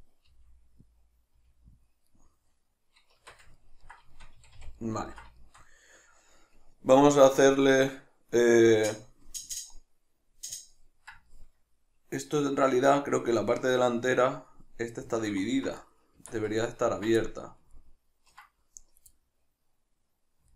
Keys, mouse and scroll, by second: 0.3 g, 0.9 click, 1.4 middle click, 1.4 g, 1.9 click, 2.1-15.8 middle drag, 3.2 Tab, 4.4 a, 15.8 right click, 16.2 Tab, 16.6-20.5 ctrl+middle drag.